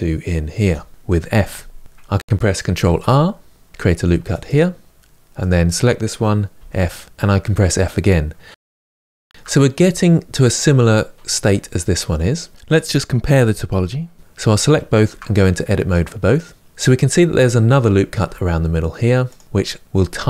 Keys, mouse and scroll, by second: 0.5 f, 1.8 middle click, 2.5 ctrl+r, 5.1 click, 6.3 f, 7.1-8.5 middle drag, 8.5 f, 8.7 middle click, 9.0 scroll down 2, 9.1 Tab, 9.2-13.7 shift+middle drag, 13.7 shift+click, 14.8 Tab, 15.4-17.8 middle drag, 17.8 ctrl+r.